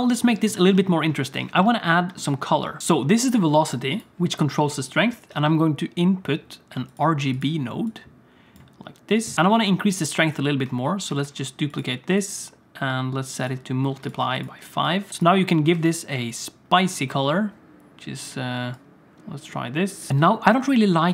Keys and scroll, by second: 15.9 ctrl+space, 20.2 ctrl+s.